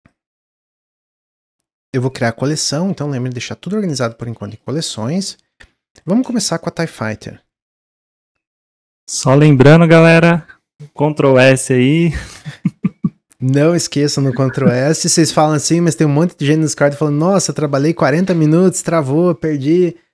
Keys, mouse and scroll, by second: 0.7 click, 1.9-4.0 drag, 4.2 click, 4.4-7.5 drag.